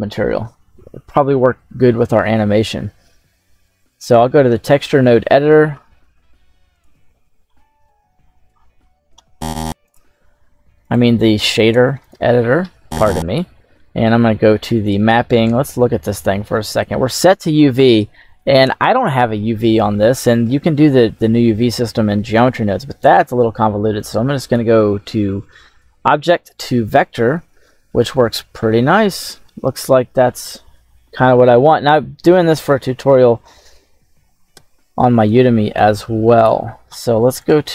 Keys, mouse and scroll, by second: 4.5-5.8 scroll down 10, 5.8 middle click, 6.6 right click, 7.0-7.8 scroll down 4, 7.7-8.9 scroll up 7, 10.7-12.0 drag, 12.5 middle click, 13.3-13.6 scroll up 2, 13.6 middle click, 14.2-15.5 scroll up 4, 22.2-23.1 drag, 23.8-24.4 drag, 27.2-27.8 middle drag, 28.0-28.7 scroll up 1, 28.7-30.0 scroll up 1, 30.0 scroll down 2, 33.2 scroll down 2, 34.4 KP_7, 36.2 click, 37.2 click.